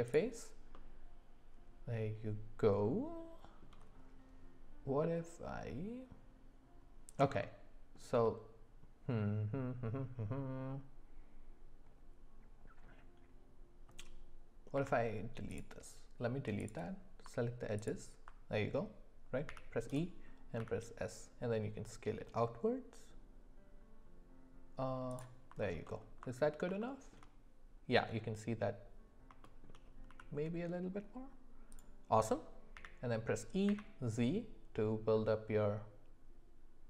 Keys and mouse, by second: 0.7-3.6 middle drag, 7.5 middle click, 14.7 x, 16.7 click, 19.9 e, 20.6 s, 25.6 alt+middle click, 25.8 alt+middle click, 26.8 shift+middle click, 29.4 shift+middle click, 30.1 s, 32.7 e.